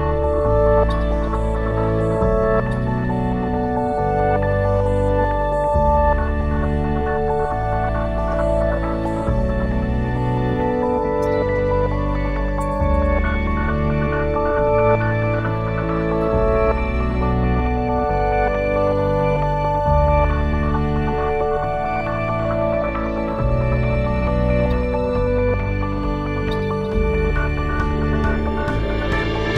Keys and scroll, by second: 1.0 ctrl+c, 6.8 ctrl+v, 10.2-12.2 typing, 13.3 Return.